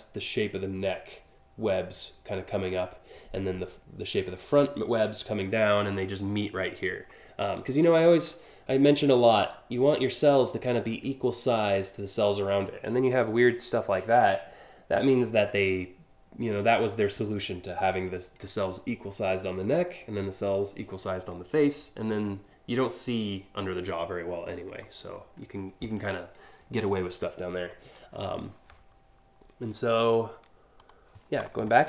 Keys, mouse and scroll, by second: 30.4 click.